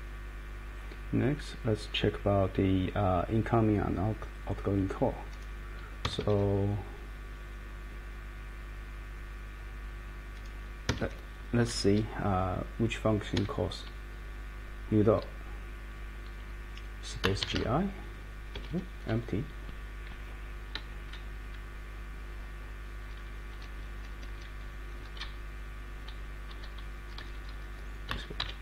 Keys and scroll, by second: 6.0 Escape, 10.9 Escape, 11.0 Escape, 13.3 Escape, 17.1-18.0 typing, 18.6 Escape, 18.7 Escape, 21.1 Down, 23.0 Down, 23.3 Down, 23.6 Down, 23.7 Down, 23.9 Down, 24.1 Down, 24.3 Down, 24.6 Up, 24.8 Up, 25.0 Up, 25.2 Down, 25.7-26.4 Down, 26.8 Right, 27.0 Right, 27.2 Right, 27.3 Right, 27.5 Right, 28.1 space, 28.4 c.